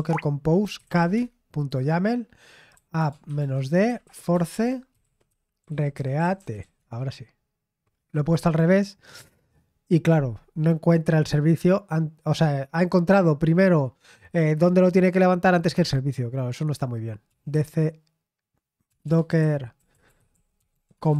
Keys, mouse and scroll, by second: 0.0-1.3 typing, 2.4-7.2 typing, 8.4-9.5 typing, 17.2-21.1 typing.